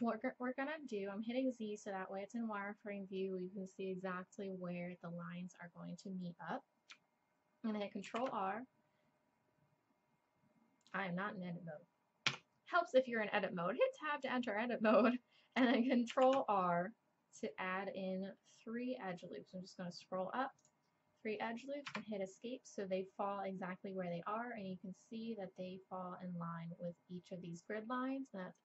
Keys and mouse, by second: 8.1 ctrl+r, 12.3 Tab, 16.1 ctrl+r.